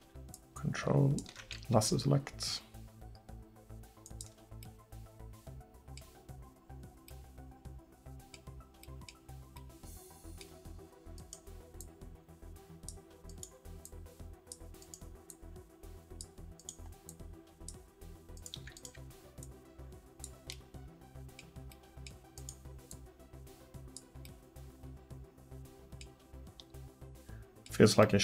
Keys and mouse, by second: 0.4-1.5 drag, 1.8 g, 7.4-9.7 drag, 20.6 middle click, 23.0-24.0 middle drag, 24.4 middle click, 26.1-27.1 middle drag.